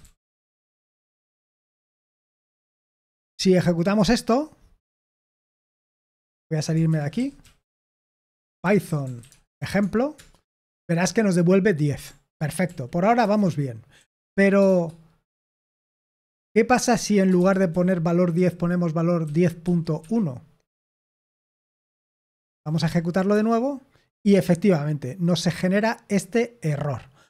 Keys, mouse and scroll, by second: 0.0-1.8 typing, 6.8-10.8 typing, 12.2 ctrl+p, 12.6 ctrl+p, 13.1 Return, 14.6 shift+g, 15.7-18.3 typing, 19.3-20.0 typing, 21.3-22.4 typing, 22.5 ctrl+p, 22.8 ctrl+p, 23.2 Return.